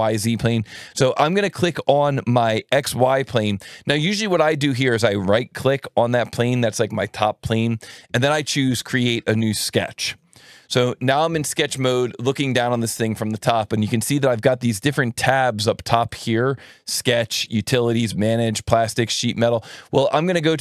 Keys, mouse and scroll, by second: 3.8 right click, 10.0 click, 14.9 alt+1, 16.0-17.3 drag, 20.4 click.